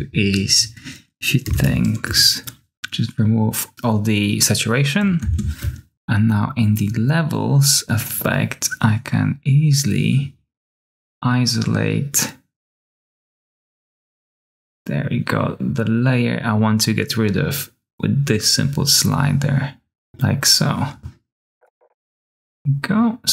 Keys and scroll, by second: 1.1-2.0 typing, 5.1 ctrl+space, 5.6-6.4 typing, 21.5-22.3 typing.